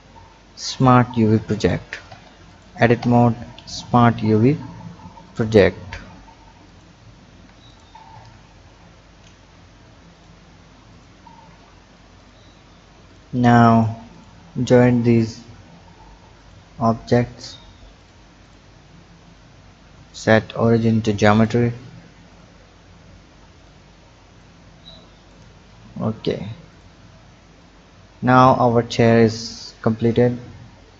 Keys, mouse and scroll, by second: 2.1 Tab, 2.4 click, 3.0 Tab, 4.0 u, 7.3 Tab, 7.6 click, 8.1 Tab, 8.8 u, 11.4 Tab, 12.2 click, 13.0 shift+drag, 13.6 shift+drag, 14.1 shift+click, 14.7 shift+click, 16.3-18.5 drag, 19.2-21.4 drag, 22.2-25.8 drag, 25.8 ctrl+z, 26.3-26.6 scroll down 4, 26.6 click, 27.6 click, 30.2-30.9 scroll up 1.